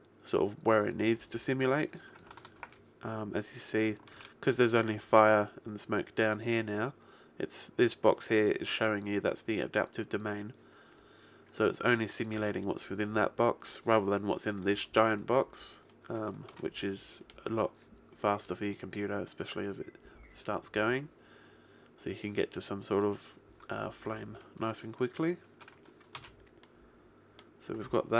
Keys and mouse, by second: 2.6 alt+a, 4.1 alt+a, 16.4 alt+a, 26.4 alt+a.